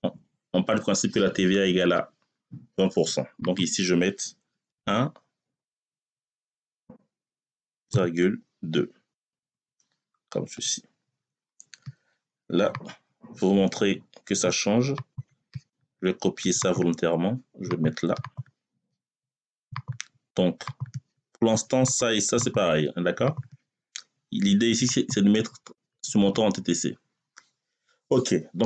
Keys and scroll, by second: 4.5 1, 5.5 BackSpace, 6.2 1, 7.7 ,, 9.0 2, 10.4 Return.